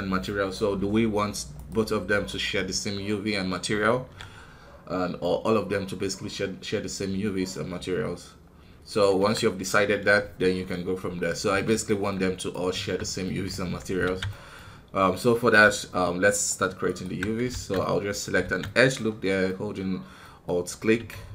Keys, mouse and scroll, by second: 1.5-2.7 right drag, 2.7-3.9 middle drag, 3.9 alt+a, 4.4-5.1 scroll down 1, 5.1-7.1 middle drag, 7.1 scroll up 2, 7.4-9.1 middle drag, 9.1 KP_1, 10.6-12.3 middle drag, 12.3 right click, 13.1 middle click, 13.4 Tab, 13.7 scroll up 2, 14.0 alt+a, 14.2 middle click, 14.9 middle click, 16.2-17.2 alt+right drag, 17.2 scroll down 1, 17.4 shift+z, 17.7 middle click, 18.4 shift+z, 18.6-20.4 middle drag, 20.4 scroll up 3.